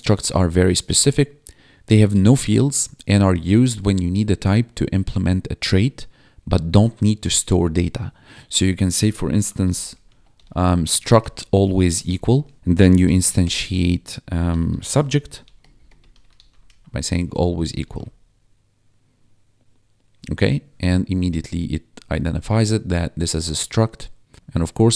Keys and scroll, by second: 9.1-17.5 typing, 17.1 Tab, 17.8 ctrl+s.